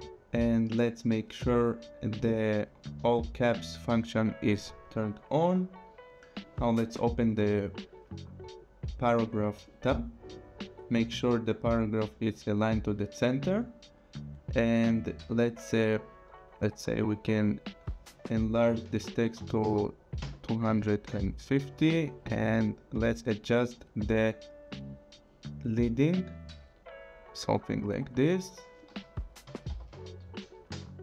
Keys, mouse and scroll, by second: 4.4 click, 7.4 click, 9.7 click, 11.8 click, 15.7 click, 18.5 click, 19.4 KP_2, 19.8 KP_5, 20.4 KP_0, 21.1 Return, 22.2 click, 25.9 click, 29.5 KP_2, 30.1 KP_0, 30.7 Return.